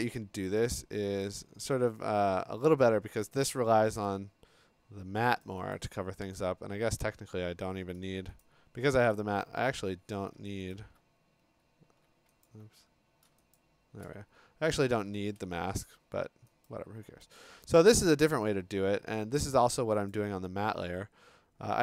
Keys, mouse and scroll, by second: 0.1 click, 1.2 click, 4.1 click, 5.4 click, 5.7 click, 7.0 click, 8.5 click, 9.1 ctrl+click, 10.7 alt+click, 12.5 alt+click, 13.6 shift+click, 16.7 click, 17.2 click, 17.8 click, 18.3 click, 19.5 click, 20.1 click.